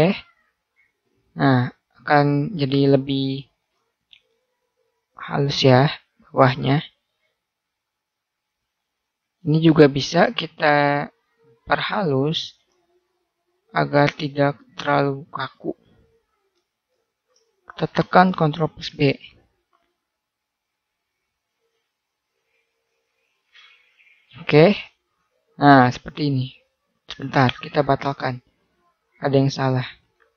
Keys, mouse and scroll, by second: 0.2 a, 1.0 middle click, 3.4-5.4 middle drag, 7.1 middle click, 10.0-13.0 middle drag, 13.6-15.5 drag, 15.8-17.2 drag, 17.2 middle click, 18.4 middle click, 18.9 ctrl+b, 24.7 a, 28.3 ctrl+z.